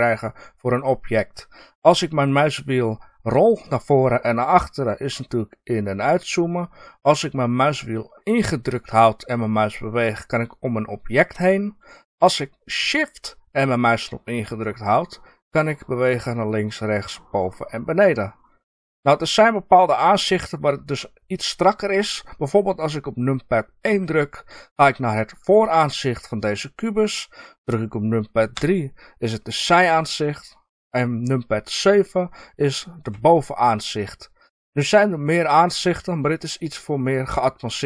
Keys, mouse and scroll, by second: 3.3 scroll up 1, 4.2 scroll down 1, 5.3 scroll up 1, 6.1 scroll down 1, 8.1-23.8 middle drag, 23.8 KP_1, 25.2 scroll up 1, 28.5 KP_3, 33.1 KP_7.